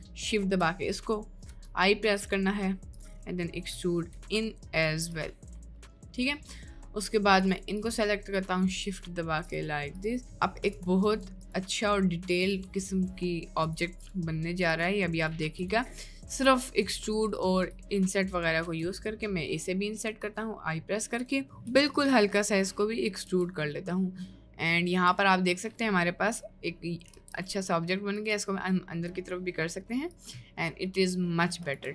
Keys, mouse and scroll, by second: 1.1 middle click, 1.4 i, 3.3 middle click, 4.0 middle click, 4.2 e, 5.7 middle click, 6.0 middle click, 6.2 click, 6.7 click, 9.5 shift+click, 13.8 shift+click, 14.8 shift+click, 15.2 shift+click, 16.9 shift+click, 20.0 i, 21.4 middle click, 21.8 e, 23.3 Tab, 23.8-24.8 middle drag, 25.0 Tab, 25.3 middle click, 27.0 g, 28.4 Tab, 28.8 middle click, 30.5 middle click.